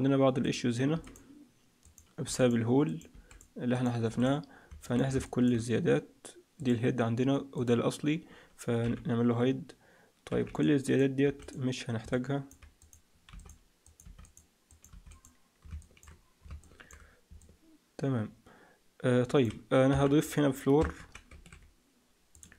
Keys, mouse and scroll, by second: 0.3 click, 0.8 x, 1.7 click, 2.1 x, 2.8 click, 3.0 x, 3.7 click, 4.0 x, 4.7 middle click, 5.1 shift+middle click, 6.5 click, 7.5 click, 8.7 h, 10.2 b, 11.1 x, 12.0 middle click, 12.7 click, 13.2 x, 13.7 click, 13.9 x, 14.6 click, 14.8 x, 15.7 shift+middle click, 16.7 shift+middle click, 17.3 middle click, 19.8 KP_1, 20.1-20.7 scroll down 4, 20.9 shift+c, 21.2 shift+a.